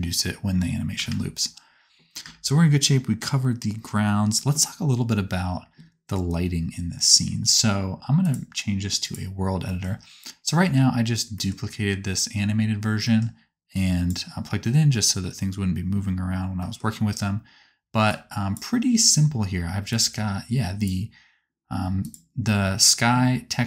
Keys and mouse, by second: 1.0 space, 2.2 space, 22.0-23.3 drag, 23.3-23.6 right drag.